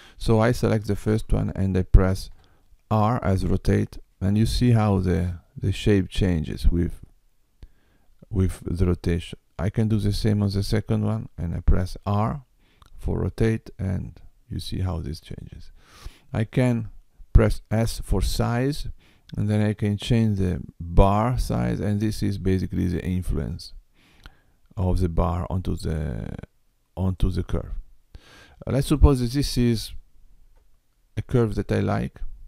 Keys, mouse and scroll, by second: 2.2 r, 9.9 click, 11.7 r, 17.9 s, 28.9 click, 30.4 Tab.